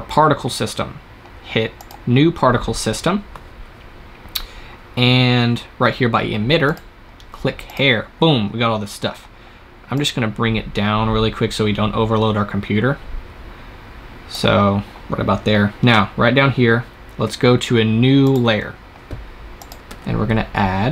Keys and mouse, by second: 1.6-4.3 drag, 6.5-9.7 drag, 9.8-19.7 drag, 19.7 shift+a.